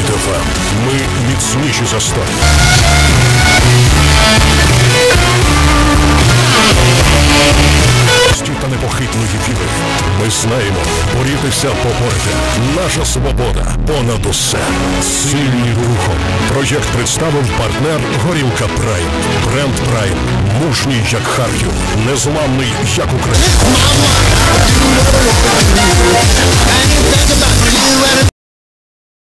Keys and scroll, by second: 8.3 Page_Down.